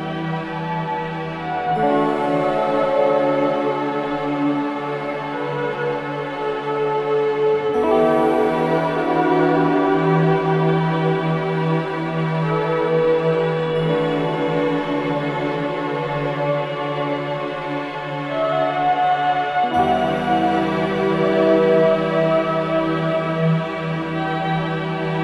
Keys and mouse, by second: 1.5-2.2 drag, 4.4 space, 8.6 click, 9.6-10.4 drag, 12.5 space, 12.9 click, 13.2 space, 14.5 space, 15.6 click, 16.7 shift+click, 17.5-17.8 alt+shift+drag, 18.0-18.5 ctrl+alt+drag, 19.3-20.1 shift+drag, 20.3 shift+click, 21.7-22.5 drag.